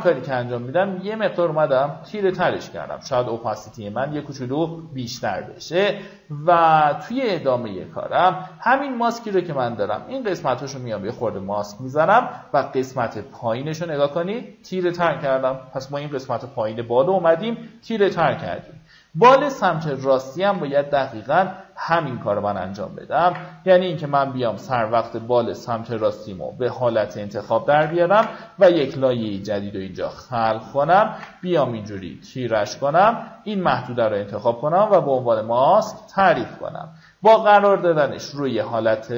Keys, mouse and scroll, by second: 15.1 alt+scroll down 1, 16.1-16.5 alt+scroll up 2, 17.8 alt+scroll up 1, 21.5 ctrl+click, 22.8 ctrl+d, 25.4 ctrl+click, 26.3 click, 27.4 ctrl+alt+shift+n, 29.2-30.5 drag, 30.7 ctrl+d, 31.9-39.1 ctrl+drag.